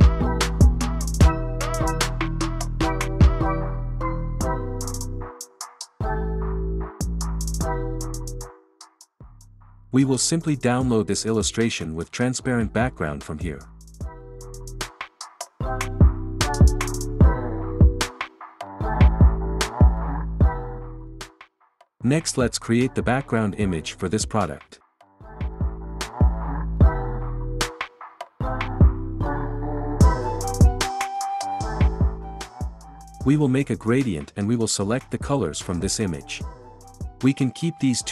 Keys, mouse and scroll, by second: 7.1-8.1 drag, 9.4-10.4 drag, 11.8-12.8 drag, 13.3-14.3 drag, 19.7 click, 25.7 click, 28.4 click, 33.7 click, 35.7 click.